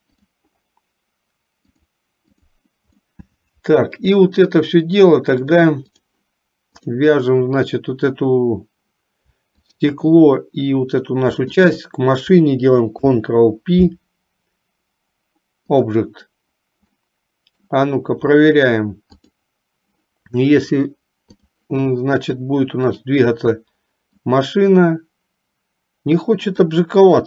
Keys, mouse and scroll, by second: 0.4 click, 1.8 click, 3.3 middle click, 5.6 click, 7.0 click, 11.6 shift+click, 13.0 ctrl+p, 17.2 middle click, 19.3 click, 20.7 click, 23.1 click, 24.3-26.9 drag.